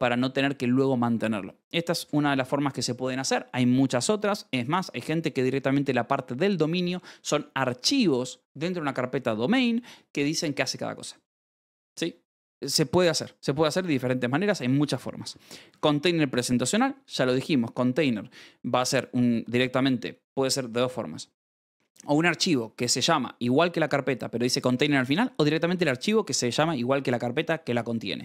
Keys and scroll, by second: 0.1 Escape, 14.2 j, 15.2 shift+v, 15.6 Escape.